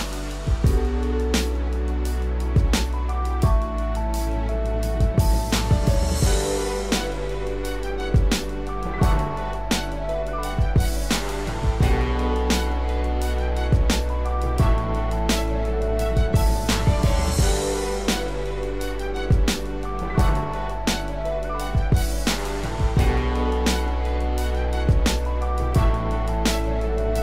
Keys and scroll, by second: 11.4 ctrl+0, 12.0 ctrl+0.